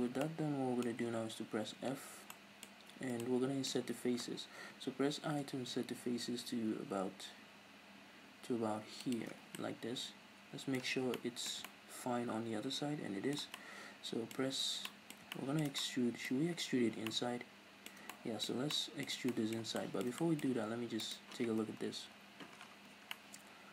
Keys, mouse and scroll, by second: 1.8 f, 9.1 shift+click, 9.3 scroll down 1, 9.5 middle click, 10.0 middle click, 10.9-21.0 shift+middle drag, 10.9 scroll down 2, 14.3-14.8 scroll up 2, 16.3-16.9 scroll up 2, 21.0 right click, 21.9 KP_Decimal, 22.5 scroll down 2, 22.9-23.7 middle drag.